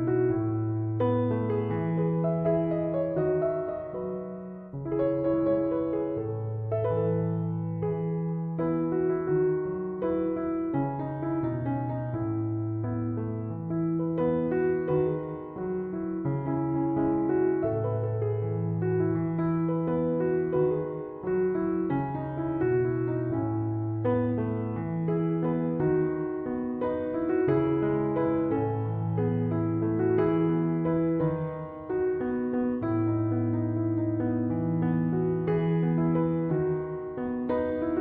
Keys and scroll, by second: 3.1 Escape, 12.3 Escape, 31.0 Return.